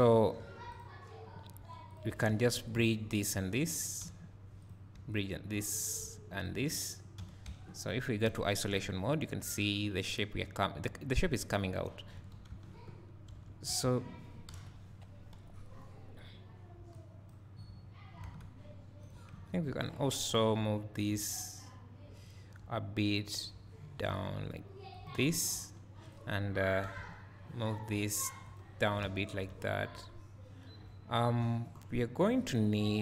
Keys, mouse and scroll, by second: 3.4 ctrl+click, 5.2 ctrl+click, 6.5 ctrl+click, 8.2 KP_Divide, 8.8 `, 12.1 KP_3, 12.5 Tab, 13.7 1, 14.5 KP_1, 15.4 KP_3, 16.9-19.1 drag, 17.5 scroll up 1, 18.2 alt+a, 19.9 ctrl+click, 23.9 g, 25.2 click, 26.9 g, 28.7 click, 29.0 alt+a, 29.3 scroll down 1.